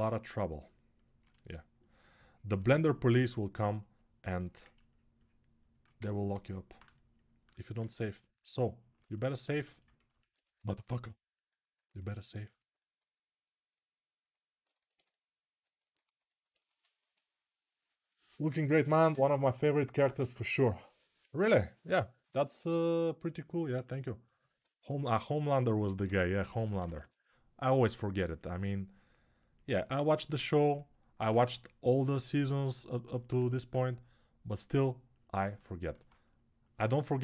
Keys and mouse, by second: 2.5-24.2 alt+drag, 10.3 g, 25.8 g, 26.1 [, 26.3 [, 30.9-35.3 alt+drag.